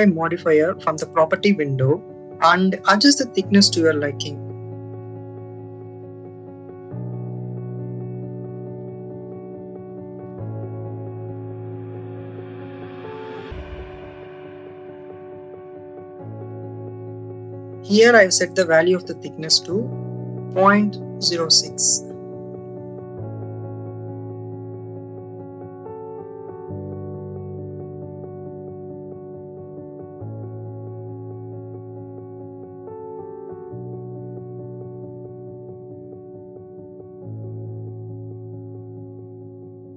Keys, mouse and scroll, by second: 4.4 click, 4.6 click, 5.0 click, 5.5 click, 5.9 click, 6.3 click, 8.3 click, 10.0 click, 11.5 click, 12.5-14.0 drag, 15.3-18.2 drag, 20.8 click, 23.6-27.2 drag, 28.1 click, 29.5 click, 31.2 click, 33.0-36.7 drag, 37.6-38.9 drag, 39.7 click.